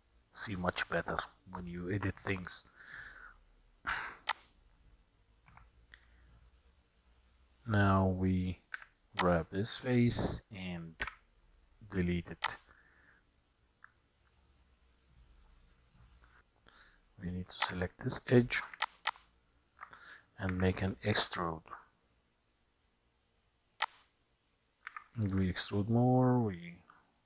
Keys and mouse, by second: 0.7 middle click, 1.3-2.1 shift+middle drag, 4.4 click, 5.8 Tab, 8.8 3, 9.2 click, 11.1 Delete, 13.7 middle click, 15.3 middle click, 16.4 middle click, 18.9 alt+shift+click, 19.2 alt+shift+click, 20.6 e, 25.0 e.